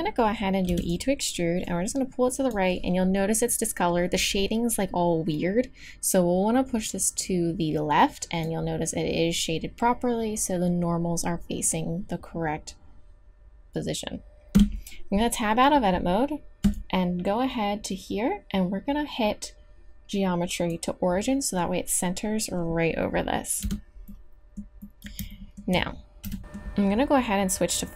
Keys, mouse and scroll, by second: 0.6 e, 1.6-2.6 drag, 6.1-8.7 drag, 14.6 Tab, 16.6 click, 23.6 Tab, 24.2 click, 24.9 click, 26.2 KP_3, 27.8 click.